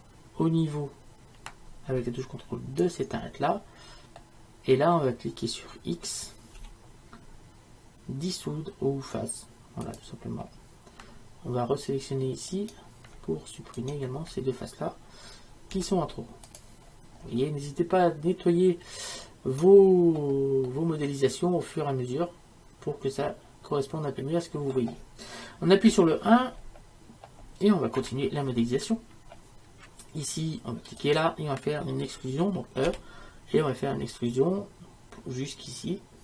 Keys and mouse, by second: 4.2-6.0 drag, 6.6 x, 12.6-18.0 right drag, 15.8 x, 18.6 middle click, 20.7-21.9 middle drag, 25.9 KP_1, 31.0-36.2 right drag, 32.9 e.